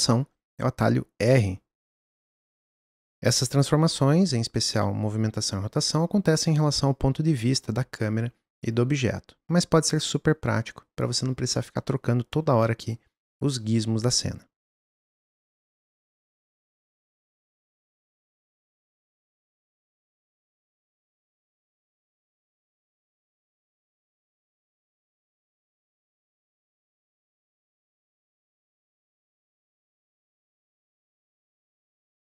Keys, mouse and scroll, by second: 1.6 r, 13.2-15.3 drag, 16.0 click, 16.8 click, 18.1 click, 18.5 s, 19.3 click, 19.5 middle click, 19.7 click, 21.6 click, 22.5 click, 23.2 s, 24.0 g, 25.3 click, 26.1 click, 26.9 s, 27.3 click, 28.4 g, 29.9 g, 30.6 g, 31.2 click.